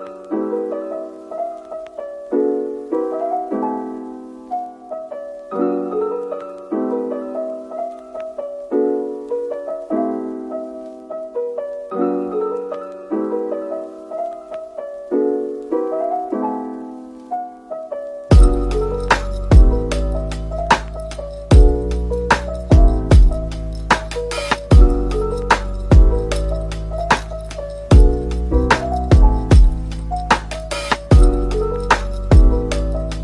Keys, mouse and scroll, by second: 0.2-0.9 scroll down 1, 0.9-1.3 typing, 2.4 middle click, 3.3-3.8 scroll up 1, 3.8 middle click, 5.4 Tab, 5.8 middle click, 6.7 Tab, 7.8-8.5 typing, 10.2-11.3 typing, 13.2-15.9 typing, 16.5 double click, 16.8 middle click, 18.2 typing, 19.3 Tab, 20.0 typing, 22.0-23.0 typing, 24.4 middle click, 25.2-25.5 scroll up 1, 26.2 typing, 28.4 scroll up 1, 29.9 typing, 32.1 scroll down 1, 32.4 middle click.